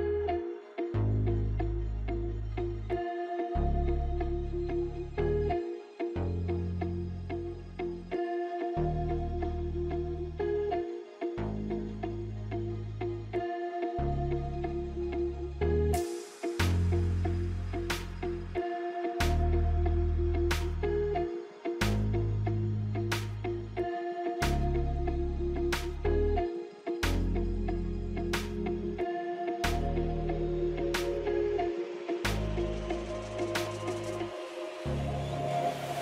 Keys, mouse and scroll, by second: 0.7-10.7 alt+drag, 13.3 click, 15.0-15.4 scroll down 1, 15.4 scroll up 1, 16.0 scroll down 1, 16.3 F9, 17.1-18.6 drag, 23.0 alt+scroll up 1, 24.4-31.7 drag, 32.8 F9, 34.1 click, 34.2 click.